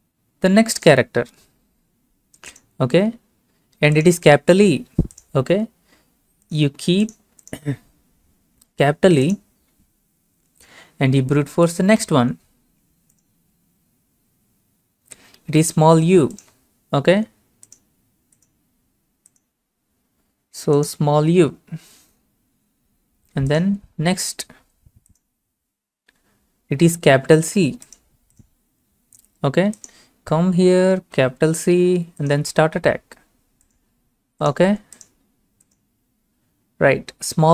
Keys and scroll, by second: 10.5 e, 22.1 u, 31.2 c.